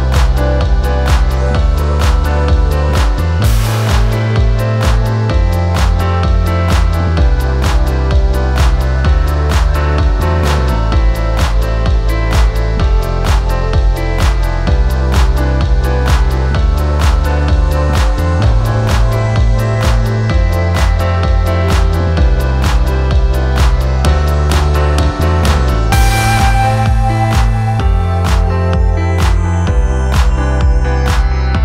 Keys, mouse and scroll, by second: 1.0 ctrl+t, 2.6 alt+click, 3.2 ctrl+z, 7.1 alt+Right, 7.2 alt+Right, 7.7 alt+Right, 27.4 click.